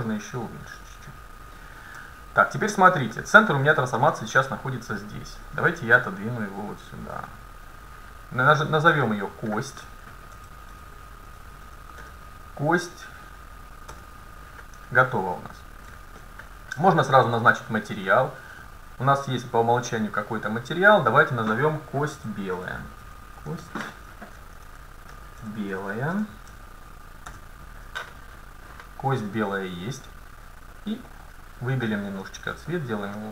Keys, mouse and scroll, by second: 2.0 Tab, 3.2-4.4 middle drag, 4.4 scroll down 1, 5.5-7.7 drag, 9.0-11.3 drag, 15.2-16.2 scroll down 1, 16.2-20.2 middle drag, 17.1-20.5 drag, 21.3-22.9 drag, 31.1-33.3 drag.